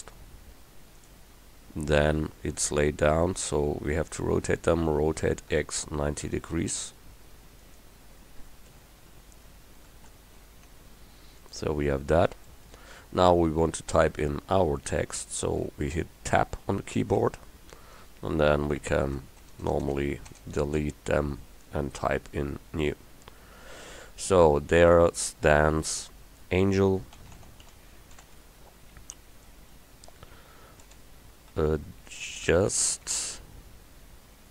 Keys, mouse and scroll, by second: 2.0-5.0 middle drag, 5.0 r, 9.9 r, 11.9 middle click, 13.1 middle click, 17.3 Tab, 19.5 BackSpace, 19.7 BackSpace, 19.9 BackSpace, 20.4 BackSpace, 22.4 middle click, 22.9 middle click, 27.2-28.3 typing, 31.0-33.1 typing.